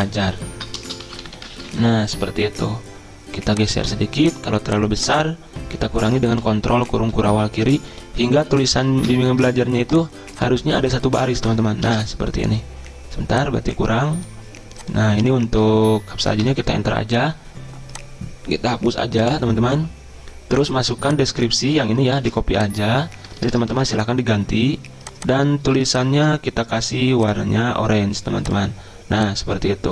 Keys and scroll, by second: 0.0-2.2 typing, 6.4 ctrl+[, 6.7 ctrl+[, 7.0 ctrl+[, 7.3 ctrl+[, 7.6 ctrl+[, 8.0 ctrl+[, 8.2 ctrl+[, 11.5 BackSpace, 15.8 Left, 16.4 Return, 19.2 Delete, 22.2 ctrl+c, 23.4 Return, 23.6 Return, 23.8 ctrl+v.